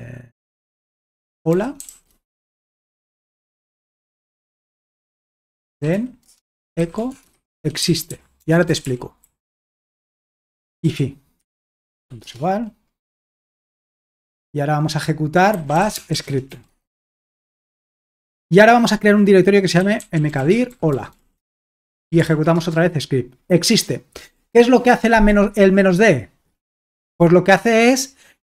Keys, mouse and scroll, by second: 1.0-14.1 typing, 15.3-17.0 typing, 17.0 Return, 19.5-21.6 typing, 22.0 ctrl+p, 22.2 ctrl+p, 22.5 Return.